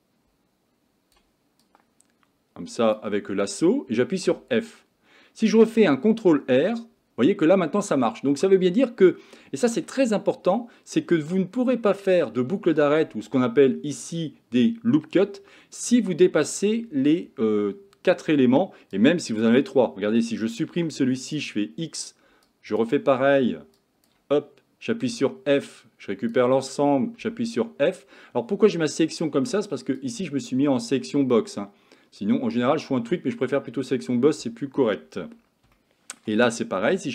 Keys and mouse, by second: 1.8-3.0 drag, 4.3 f, 6.1 ctrl+r, 19.2 click, 20.7 x, 22.5 click, 23.8 shift+click, 25.1 f, 25.8 click, 27.3 f, 30.0-34.0 drag, 35.8 shift+middle click.